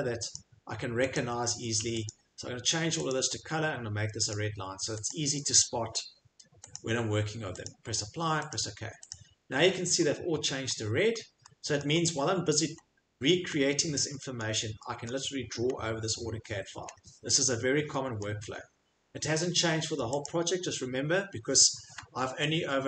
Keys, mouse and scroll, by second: 0.3 click, 1.1 click, 2.1 click, 3.1 click, 4.3 click, 5.1 click, 6.7 click, 7.6 click, 8.5 click, 9.1 click, 9.6 middle click, 10.0 right click, 10.0 scroll, 10.7-11.1 scroll, 11.8 middle click, 11.8 scroll, 12.7 scroll, 13.5 scroll, 17.8 middle click, 18.2 middle click, 18.5 middle click, 18.5 middle click, 18.7 middle click, 20.2 click, 21.1 middle click, 21.1 middle click, 21.5 middle click, 21.7 middle click, 22.3 middle click.